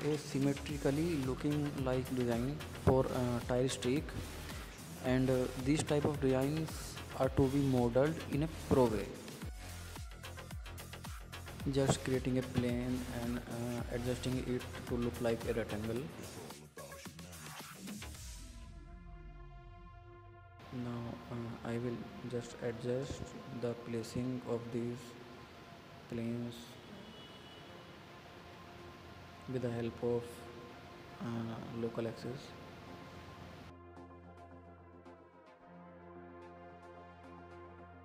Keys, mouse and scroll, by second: 0.0 shift+middle click, 0.7 click, 1.2 Tab, 1.5 click, 2.2 shift+right click, 3.0 shift+a, 5.5-6.0 scroll up 2, 7.1 s, 8.8 s, 10.9 s, 11.9 scroll up 2, 12.2-12.6 scroll down 2, 12.6 click, 12.8 drag, 13.5 ctrl+a, 15.6 click, 16.0-17.5 right drag, 17.5 drag, 19.8 r, 21.8 click, 22.2 click, 24.2 alt+d, 27.9 r, 29.2-29.6 scroll up 3, 29.6-30.2 shift+middle drag, 30.2-31.7 drag, 32.4-33.4 drag, 33.6 click, 34.3 ctrl+click, 35.1 click, 35.8 g, 37.0-38.0 drag.